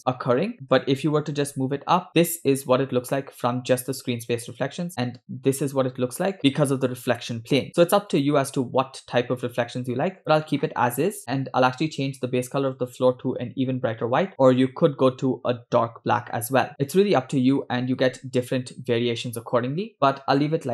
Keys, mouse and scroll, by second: 0.0 click, 0.0 scroll down 3, 0.5 scroll up 1, 0.8 g, 10.3 click, 11.2 click.